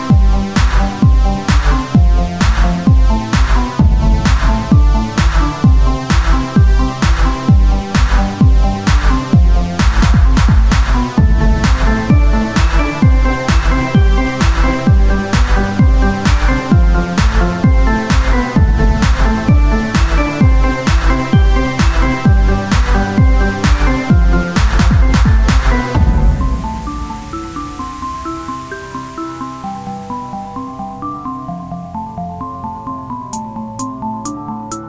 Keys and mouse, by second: 0.7 Tab, 0.7-9.7 drag, 9.7 Tab, 11.0 Tab, 11.0 shift+d, 12.5 KP_1, 13.4 r, 14.9-17.7 drag, 17.7 KP_1, 18.5 r, 20.1 click, 20.7 Tab, 21.5 ctrl+Tab, 22.1 z, 22.4 c, 22.9 click, 23.4 r, 25.0 ctrl+z, 25.6 r, 26.6 z, 27.5 click, 28.9 r, 30.0-31.5 drag, 30.6 z, 30.8 c, 31.8 z, 32.4 r, 33.5 click.